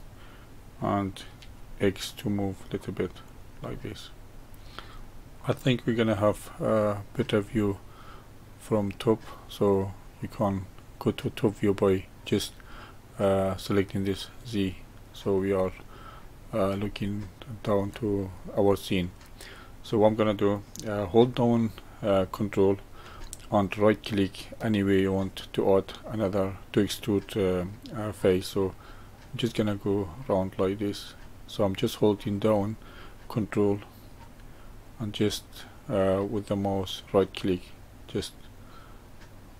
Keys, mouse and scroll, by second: 3.7-4.5 middle drag, 4.5-5.0 scroll down 5, 5.4-10.5 middle drag, 14.3 click, 15.4-17.1 scroll up 1, 17.1-20.3 shift+middle drag, 29.4 ctrl+right click, 31.0 ctrl+right click, 32.8 ctrl+right click, 34.8 ctrl+right click, 37.4 ctrl+right click, 38.7 ctrl+right click.